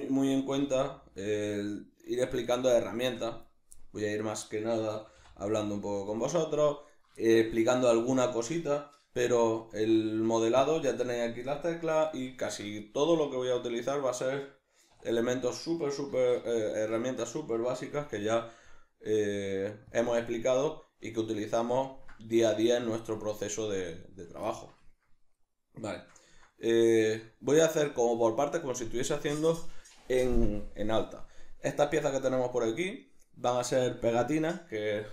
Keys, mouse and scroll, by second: 0.6 g, 1.4 click, 1.4-4.2 middle drag, 2.0 z, 4.2 right click, 4.4-6.2 middle drag, 5.0 g, 6.2 click, 6.3-6.9 middle drag, 6.9 right click, 7.2-10.6 shift+middle drag, 9.7 e, 10.6 click, 12.3 alt+o, 13.0-15.3 ctrl+shift+middle drag, 14.9 2, 15.3 right click, 16.1 alt+q, 16.6-20.0 shift+middle drag, 17.9 g, 20.0 click, 21.0-35.1 middle drag.